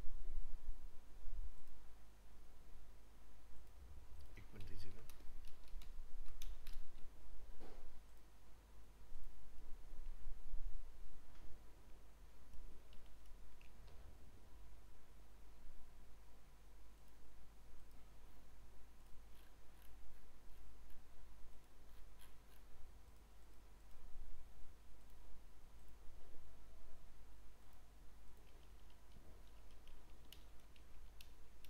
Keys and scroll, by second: 4.8 ctrl+Left.